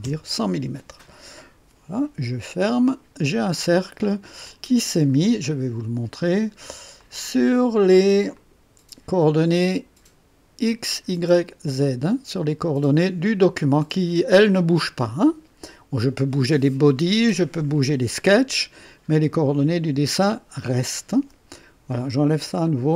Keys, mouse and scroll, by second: 0.0 KP_Enter, 2.4 click, 3.5-4.1 scroll down 2, 4.4-5.2 drag, 6.9 click, 8.3 click, 22.6 click.